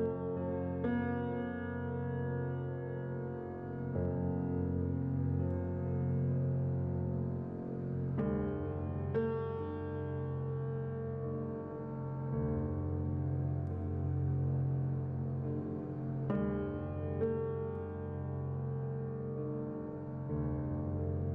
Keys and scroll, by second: 5.9 typing, 8.0 z, 11.2 typing, 14.0 a.